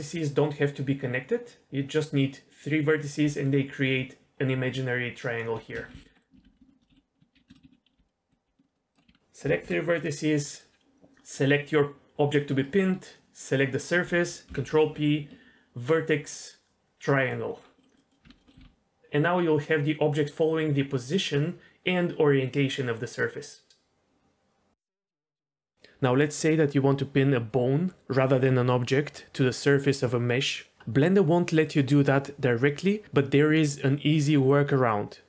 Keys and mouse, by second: 3.2 d, 3.4-5.4 drag, 5.4 d, 5.8 ctrl+z, 5.9 ctrl+z, 6.1 middle click, 6.4 ctrl+z, 6.9-9.1 typing, 7.5 ctrl+shift+z, 8.1 middle click, 8.7 click, 9.1 Tab, 9.4 alt+h, 10.4 middle click, 14.5 ctrl+p, 17.8 middle click, 17.9 click, 18.2 Tab, 18.5 middle click, 18.6 r.